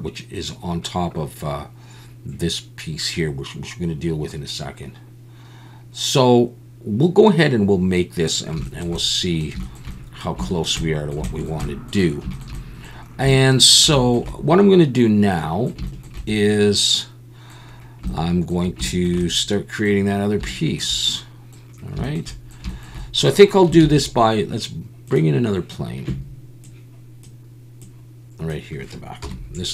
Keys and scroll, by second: 23.8 shift+a, 29.2 KP_7.